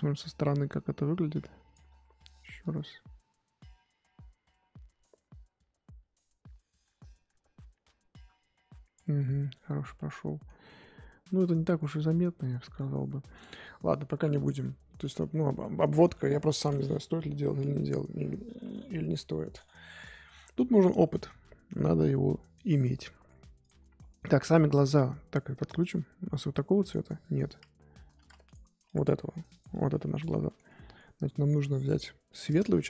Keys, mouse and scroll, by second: 0.4-1.9 drag, 1.9 ctrl+z, 3.2-9.1 drag, 9.1-9.9 scroll down 13, 9.9 middle click, 10.4 scroll down 1, 10.5-10.9 scroll up 3, 11.7 ctrl+z, 12.4 middle click, 12.8-13.2 scroll up 4, 13.2-14.6 middle drag, 14.6 scroll up 1, 14.8-17.1 middle drag, 17.1-18.5 scroll down 1, 18.5 KP_1, 23.6 click, 24.0-26.3 middle drag, 26.3-28.1 drag, 28.1 ctrl+z, 28.9 click, 29.1 f, 29.7 click, 30.4-32.3 shift+middle drag, 32.3 click, 32.7-32.8 shift+middle drag.